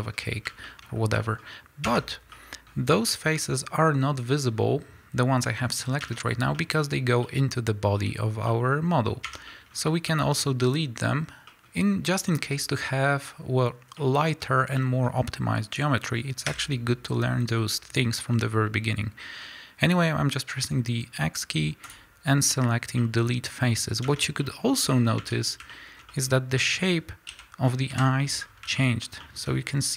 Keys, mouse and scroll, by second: 0.8 scroll up 2, 2.0 Tab, 5.7-6.2 scroll down 2, 6.2 Tab, 8.0-8.4 scroll up 2, 9.7 scroll up 2, 14.6 scroll down 1, 14.7 middle click, 15.1-16.4 scroll up 1, 16.4 x, 22.9 middle click, 23.7-26.6 middle drag, 24.2 Tab, 25.0-25.3 scroll up 2, 25.3 Tab, 27.2 KP_1, 27.8 KP_3, 28.3 scroll up 1, 28.7 shift+middle click, 29.4 scroll up 1.